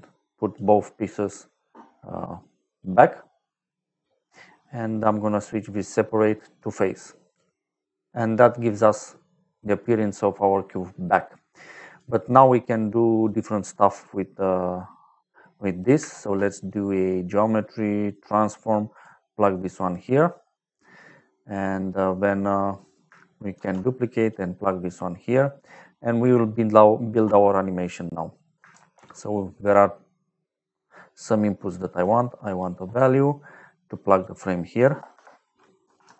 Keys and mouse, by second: 1.5 middle click, 5.7 click, 7.2 click, 7.9 middle click, 9.5 click, 10.8 middle click, 11.4 click, 12.2 click, 13.2 click, 15.3 middle click, 16.0 shift+a, 18.0 click, 18.8 click, 19.4 click, 23.5 shift+d, 24.1 click, 24.6 click, 25.9 middle click, 27.4 middle click, 28.4 click, 28.6 shift+a, 31.7 click, 32.4 click, 34.0 click, 35.0 shift+3, 35.7 f, 36.1 a.